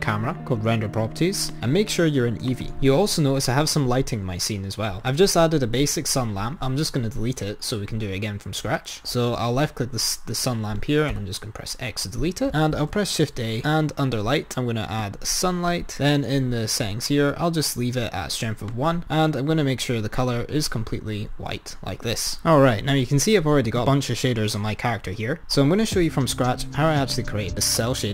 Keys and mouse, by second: 1.6-3.0 drag, 4.9 click, 11.3 x, 12.8 shift+a, 15.8 click, 18.8 click.